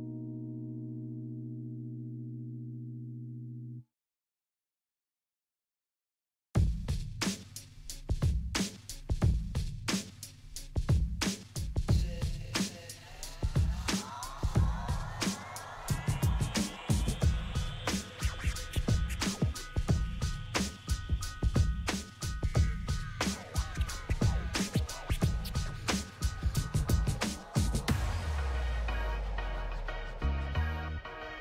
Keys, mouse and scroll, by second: 0.6-1.1 scroll down 1, 2.5 click, 4.7-5.9 typing, 6.0 click, 6.3 scroll up 1, 7.5 click, 7.9 scroll up 1, 8.7 scroll down 1, 9.9-12.0 drag, 12.0 scroll down 1, 12.6 shift+scroll down 1, 13.2 shift+click, 15.1 click, 15.5 scroll up 1, 16.3-17.0 scroll down 1, 18.1-25.3 drag, 26.4 F4, 29.1 click.